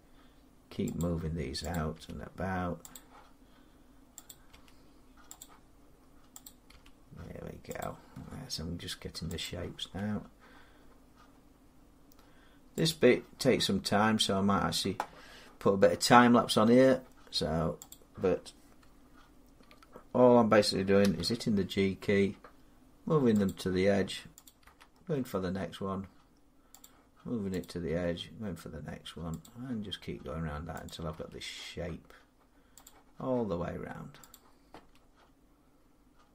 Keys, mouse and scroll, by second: 0.8 click, 1.6 click, 1.8 g, 2.8 click, 4.1 click, 4.3 g, 5.2 click, 6.6 g, 7.6 click, 9.4 click, 9.6 g, 12.7 click, 13.7 scroll down 4, 16.0-17.7 scroll up 1, 17.7 click, 18.8 scroll, 20.9 g, 23.3 click, 24.5 click, 24.5 g, 26.7 click, 27.7 click, 27.7 g, 29.3 click, 30.8 click, 31.0 g, 32.7 click, 34.3 click, 34.6 g.